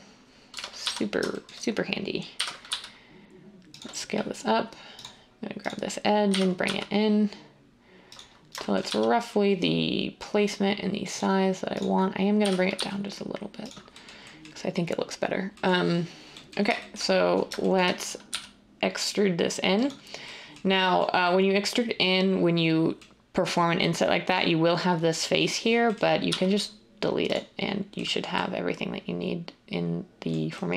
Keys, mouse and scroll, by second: 0.5 typing, 2.1-2.8 typing, 6.2-6.6 typing, 8.6-9.3 typing, 12.4-12.7 typing, 18.2 e, 26.2 x.